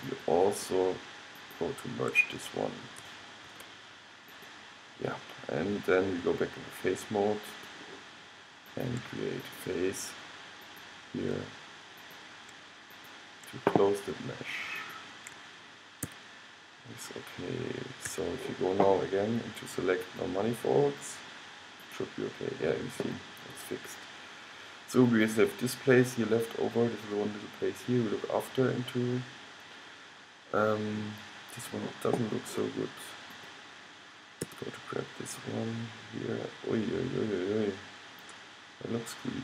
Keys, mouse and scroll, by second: 3.6 alt+m, 16.2 f, 18.2 a, 24.0-25.6 middle drag, 25.9-27.1 middle drag, 27.2 middle click, 28.2 middle click, 28.9-32.4 middle drag, 33.5-35.4 drag, 34.6 g.